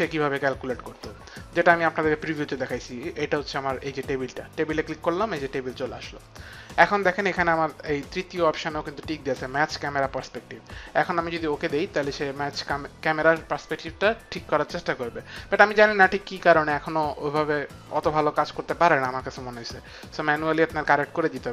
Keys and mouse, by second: 2.5 click, 11.0 click.